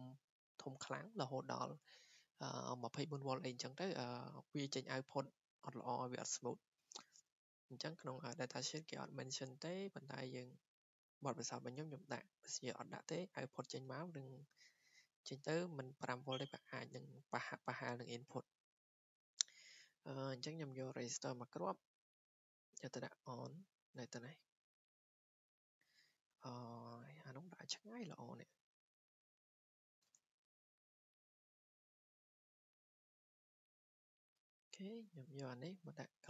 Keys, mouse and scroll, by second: 18.4 click, 18.9 click, 20.9 click, 24.1 click, 24.4 Escape, 25.0 click, 26.7 click, 27.1 click, 27.5 Escape, 28.4 click, 29.6 click, 29.9-31.0 scroll down 10, 31.7 scroll down 2, 31.8 scroll up 1, 32.0-32.6 scroll down 1, 32.6 scroll up 1, 32.7-33.0 scroll, 34.0 click, 34.3 click, 36.0 scroll down 5.